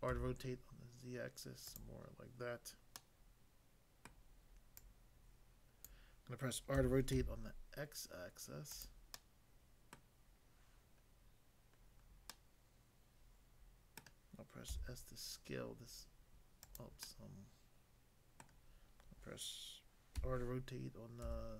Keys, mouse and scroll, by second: 0.1 z, 1.6 click, 3.0 middle click, 4.1 middle click, 4.7 click, 5.9 click, 6.7-7.1 typing, 8.7 click, 9.2 middle click, 10.0 middle click, 11.1 scroll down 1, 11.8 scroll down 1, 12.3 middle click, 13.9 middle click, 14.7 s, 16.6 click, 17.0 middle click, 18.4 middle click, 20.2 r, 21.2 z.